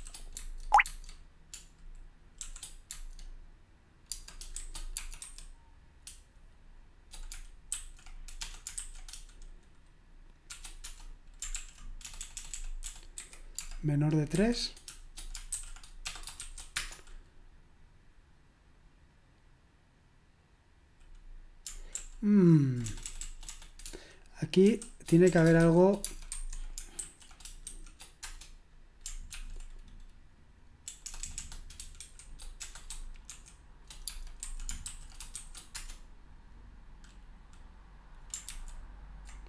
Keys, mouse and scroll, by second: 0.0-0.8 typing, 2.4-2.9 typing, 4.1 space, 7.7-8.8 typing, 10.5-10.8 typing, 11.5 ctrl+p, 12.1-16.7 typing, 22.0 ctrl+p, 22.9 BackSpace, 23.0 BackSpace, 23.2 BackSpace, 23.3 BackSpace, 24.7-29.8 typing, 31.0 BackSpace, 31.2 BackSpace, 31.4 BackSpace, 32.0 ), 33.3-35.7 typing, 38.5 ctrl+c.